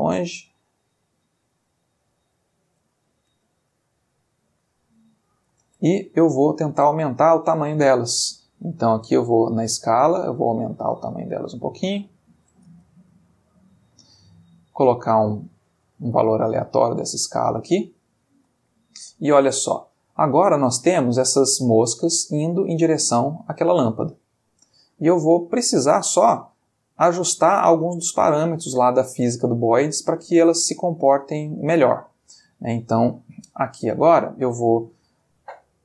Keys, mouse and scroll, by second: 1.4 click, 2.4 click, 4.0-4.9 middle drag, 6.0 shift+Escape, 6.3 shift+click, 6.9-7.4 shift+middle drag, 9.0-12.4 drag, 12.6 space, 14.6-15.5 drag, 15.6-17.4 drag, 18.6-19.2 shift+middle drag, 21.5-22.3 middle drag, 25.7 click, 26.8-28.1 middle drag, 28.1 ctrl+scroll up 1, 28.2-29.2 ctrl+middle drag, 29.7-30.2 ctrl+middle drag, 31.6-32.3 middle drag, 33.5 click, 34.8 click.